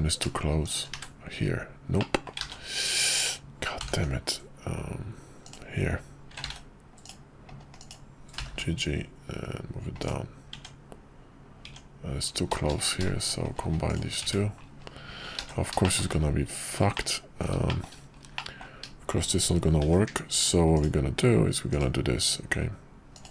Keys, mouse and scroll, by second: 1.0 1, 2.0 middle click, 2.5 ctrl+z, 3.8 g, 6.6 ctrl+z, 7.0 click, 7.8 click, 8.3 g, 10.5 Tab, 12.8 click, 13.8 shift+click, 14.3 1, 15.5 ctrl+z, 15.8 shift+middle click, 16.9 middle click, 17.7 shift+middle click, 18.3 middle click, 19.8 k.